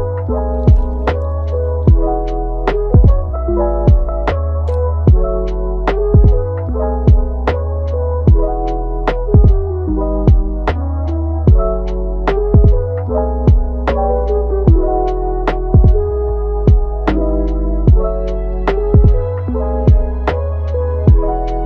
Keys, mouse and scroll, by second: 2.2-4.9 middle drag, 4.9-7.5 drag, 7.5 Tab, 12.7-13.0 scroll up 3, 13.0-13.6 middle drag, 13.6-14.0 scroll down 3, 14.0 scroll up 2, 14.3-16.8 middle drag, 16.8-17.6 scroll up 1, 17.6-18.6 scroll up 1, 18.7-21.6 drag.